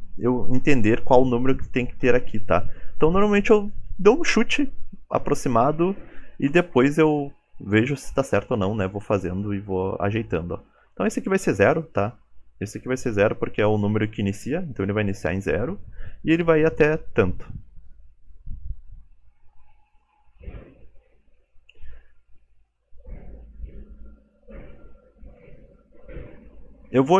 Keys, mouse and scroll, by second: 22.4-23.0 scroll down 4, 23.8 scroll down 2, 25.1 middle click, 26.0 click.